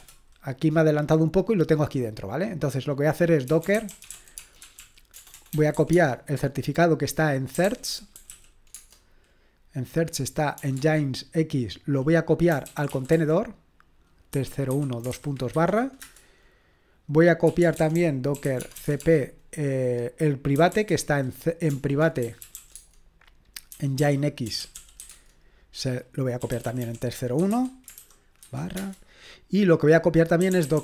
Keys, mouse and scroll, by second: 0.0-0.2 typing, 3.2-6.2 typing, 7.3-8.8 typing, 10.6 typing, 10.8 Tab, 12.3-16.0 typing, 17.2-28.8 typing, 30.2-30.8 typing.